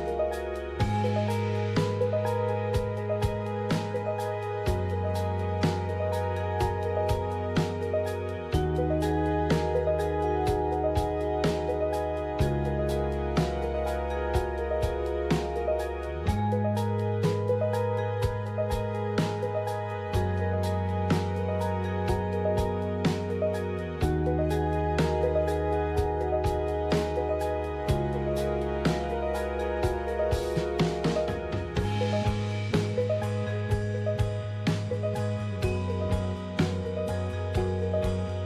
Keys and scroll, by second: 2.7 typing, 4.2-9.6 typing, 13.2 typing, 14.6-15.4 typing, 25.4 ctrl+c, 26.4 alt+Tab, 30.5 Right, 34.6-36.3 typing, 36.4 Return.